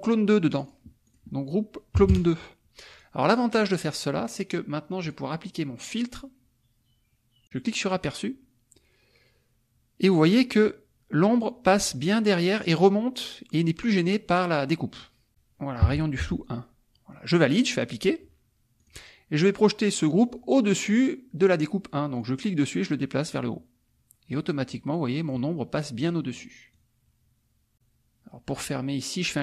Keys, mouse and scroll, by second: 0.5 click, 1.2 click, 1.9 KP_2, 2.1 KP_Enter, 2.9 click, 3.5 click, 5.1 click, 7.4 click, 7.8 click, 15.3 click, 16.2 Tab, 17.8 click, 18.8 click, 22.2-23.5 drag, 24.3-25.5 drag, 26.0 middle click, 26.7-27.7 drag.